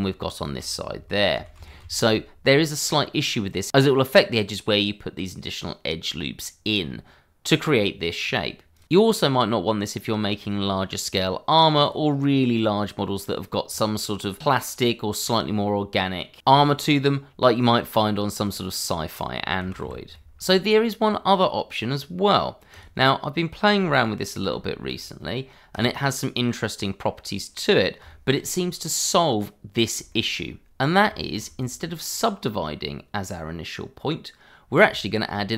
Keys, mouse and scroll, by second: 0.2 click, 1.4 ctrl+z, 2.6 middle click, 4.9 middle click, 5.8-6.8 scroll down 2, 6.8-7.9 scroll up 1, 8.2-8.7 scroll down 1, 8.7 click, 11.0-11.8 scroll down 1, 11.8 click, 18.0 click, 18.9 g, 19.1 y, 19.9 click, 20.2 shift+a, 22.7 click, 23.8 s, 24.3 click, 24.6 ctrl+a, 25.7 click, 26.3 middle click, 27.7 scroll up 1, 28.0 shift+middle click, 28.5-28.8 scroll up 1, 28.8 middle click, 30.1 shift+middle click, 30.9 scroll down 1, 31.1 shift+middle click, 31.6 click, 34.9 shift+middle click.